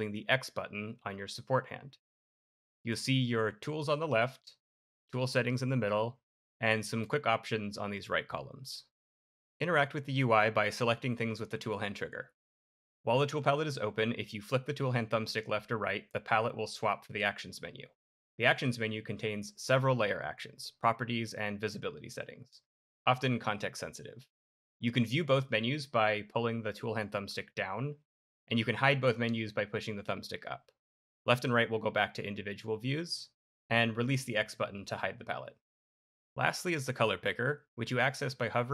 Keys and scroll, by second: 0.2 x, 15.5 Left, 17.3 Right, 27.2 Down.